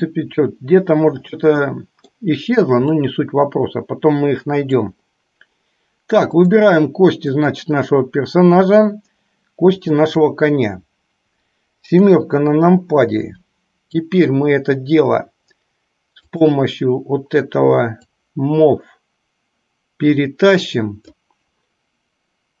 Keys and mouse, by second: 2.0-2.5 middle drag, 3.4-5.2 middle drag, 6.7 click, 7.8 click, 12.4 KP_7, 16.7 click, 18.0-21.9 drag.